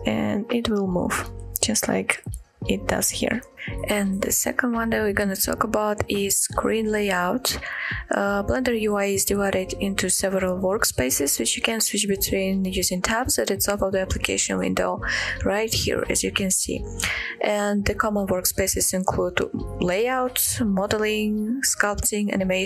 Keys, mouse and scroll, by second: 0.0-0.4 scroll up 2, 0.6-1.0 shift+middle drag, 1.2 shift+middle click, 1.6-2.1 shift+middle drag, 2.2-2.8 shift+middle drag.